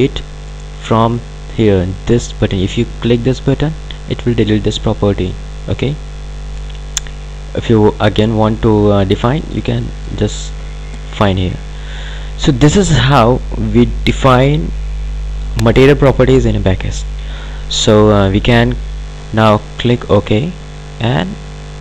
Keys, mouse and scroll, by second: 3.5 click, 8.4 click, 11.8 click, 20.2 click.